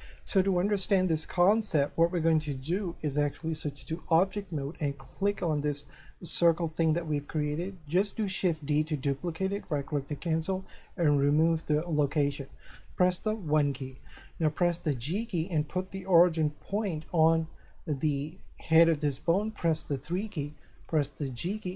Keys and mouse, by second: 1.1 shift+middle click, 3.4 click, 5.2 right click, 6.9 shift+middle click, 8.5 shift+d, 9.6 right click, 11.9 click, 13.1 1, 14.8 g, 18.7 click, 19.7 3, 21.4 g.